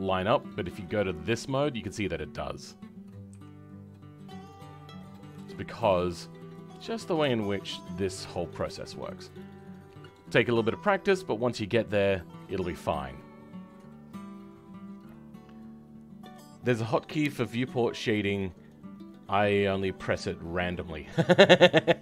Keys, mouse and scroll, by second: 8.3 shift+middle click, 8.7 scroll down 2, 9.0-22.0 middle drag.